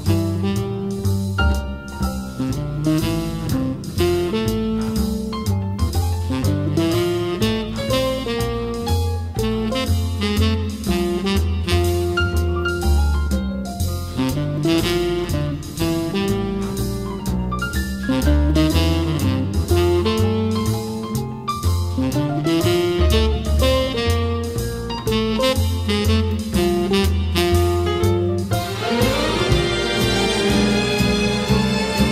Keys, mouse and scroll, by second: 0.9-2.9 drag, 2.9 scroll, 4.0-5.9 drag, 5.7-6.6 typing, 7.8 click, 8.1 middle click, 8.1 scroll, 8.2 scroll, 10.2-13.2 drag, 13.3-15.1 middle drag, 13.3 scroll, 15.1 d, 15.3 middle click, 16.1 click, 16.9 t, 18.1-23.3 drag, 23.1-24.0 typing, 25.2 click, 25.9-26.6 typing, 27.1 scroll, 27.2 scroll, 27.6 ctrl+z, 27.8 ctrl+z, 28.2 scroll up 1, 28.4 scroll, 28.6 click, 28.8 scroll, 29.0 click, 29.3-31.6 scroll up 14, 31.6 middle click.